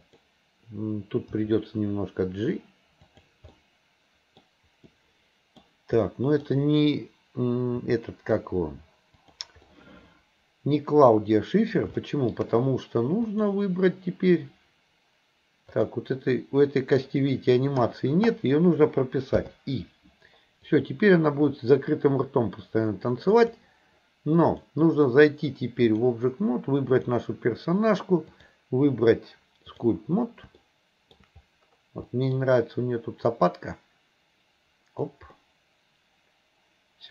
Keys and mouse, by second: 1.4 g, 3.6 middle click, 4.9-5.7 middle drag, 6.1 middle click, 7.9 g, 9.7-11.8 middle drag, 12.0 shift+middle click, 13.3 click, 15.7 click, 19.5 i, 20.8-23.7 drag, 24.7-26.2 drag, 26.9 click, 28.4-29.9 drag, 30.7 shift+middle click, 32.1 middle click, 33.4-35.1 drag, 35.4-37.1 middle drag.